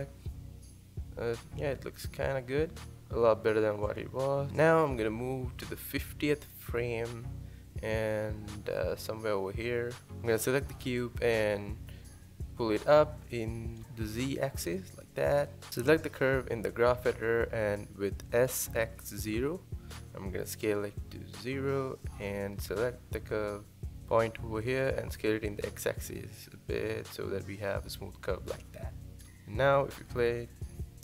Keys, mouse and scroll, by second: 0.0 click, 0.4 space, 1.6 space, 2.2 click, 2.5 space, 3.8 space, 4.9 ctrl+z, 6.8-10.2 drag, 10.4 g, 14.9 click, 15.5 click, 16.5 g, 21.5 click, 22.0 click, 22.2-23.1 drag, 23.1 s, 28.8 click, 29.0 space.